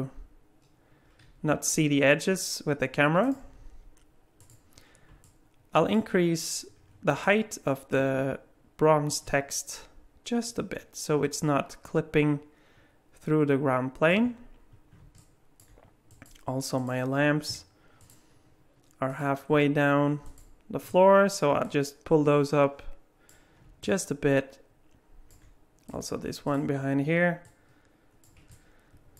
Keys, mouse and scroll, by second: 4.4 click, 5.2 alt+middle click, 6.7 scroll up 4, 7.2 alt+middle click, 9.1 click, 14.7-15.0 scroll down 1, 15.2 middle click, 16.1 click, 16.8 click, 18.0 shift+click, 19.1 click, 20.2 shift+click, 21.6 click, 23.8 middle click, 25.9 click, 26.5 click, 27.4 click, 28.5 middle click.